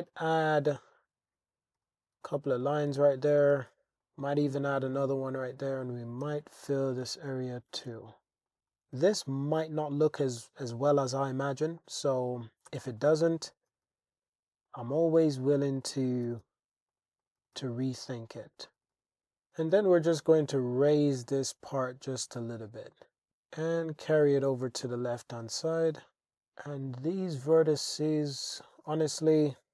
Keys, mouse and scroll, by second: 0.3 click, 0.8 shift+click, 1.8 j, 2.3-3.4 shift+drag, 3.6 super+r, 3.9 super+r, 4.0 click, 4.4 click, 5.4 shift+click, 6.2 j, 7.0 super+e, 7.9 super+r, 8.5 click, 8.6 alt+z, 8.9 Tab, 9.0 alt+z, 9.2-11.8 drag, 12.7 Tab, 12.9 click, 13.7 g, 13.9 g, 14.7 click, 14.9 click, 15.2 g, 15.4 g, 15.8 click, 16.0 click, 16.4-20.1 typing, 16.9 click, 17.2 click, 18.1 click, 21.3 click, 22.9 click, 23.5 g, 24.2 click, 24.9 click, 25.7 shift+click, 26.3 shift+Tab, 26.8 shift+click, 28.5 shift+click, 29.4 alt+shift+z.